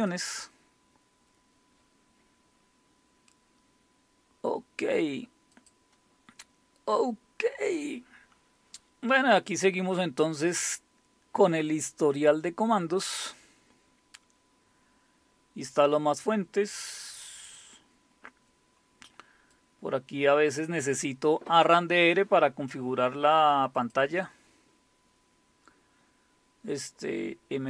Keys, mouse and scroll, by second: 0.0 click, 5.5 click, 8.8-9.9 scroll down 2, 9.9-11.9 scroll down 2, 11.9-13.3 scroll down 1, 13.3-13.9 scroll down 1, 13.9-15.6 scroll down 2, 16.7-17.9 scroll down 2, 17.9-18.5 scroll down 1, 18.5-19.5 scroll down 1, 19.5-22.3 drag, 23.7 click, 24.7-25.9 scroll down 3, 25.9 scroll down 1.